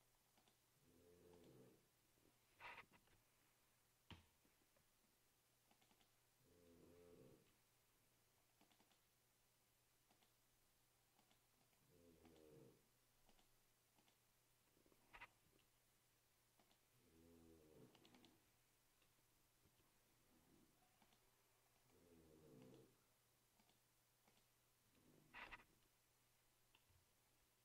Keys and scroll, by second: 3.1 ctrl+v, 4.3 Return, 7.5 ctrl+c, 15.7 ctrl+v, 19.8 ctrl+c, 25.8 ctrl+v, 27.1 Return.